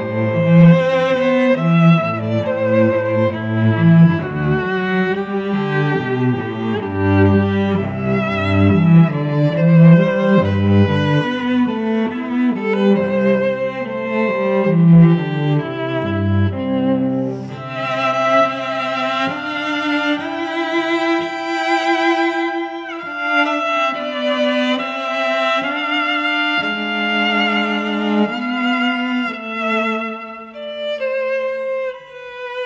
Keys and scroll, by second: 0.4 Up, 1.0 alt+Down, 1.8 Up, 2.2 alt+Down, 2.9 Up, 3.3 alt+Down, 4.1 Up, 4.4 alt+Down, 5.3 Up, 5.7 alt+Down, 6.5 Up, 7.0 alt+Down, 11.8 ctrl+e, 12.9 ctrl+t, 13.8 ctrl+z, 14.1 Return, 17.7 ctrl+t, 18.3 Return, 18.7 ctrl+t, 20.0 Return, 20.1 space, 21.1 ctrl+shift+[, 22.3 ctrl+t, 23.0 Return, 26.2 i, 28.6 ctrl+shift+n, 28.8 Return, 29.1 alt+BackSpace, 30.4 e.